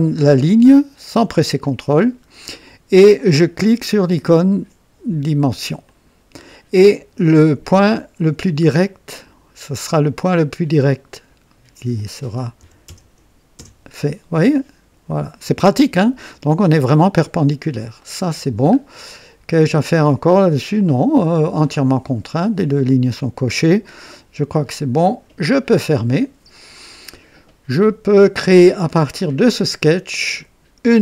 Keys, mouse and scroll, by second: 1.6 click, 5.8 click, 12.6 KP_4, 12.9 KP_0, 13.6 KP_Enter, 18.0-18.7 right drag, 18.8-19.2 scroll down 2, 19.5-20.2 right drag, 25.0 click, 30.9 click.